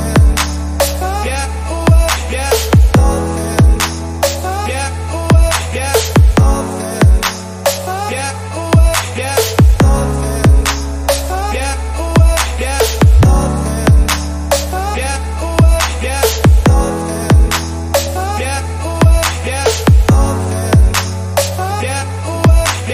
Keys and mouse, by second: 7.2-8.5 drag, 9.4-11.4 drag, 12.1-22.9 drag.